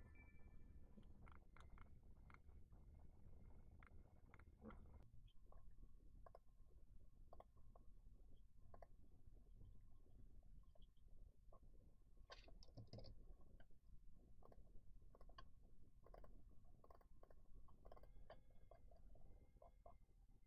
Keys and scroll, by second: 13.0 super+q.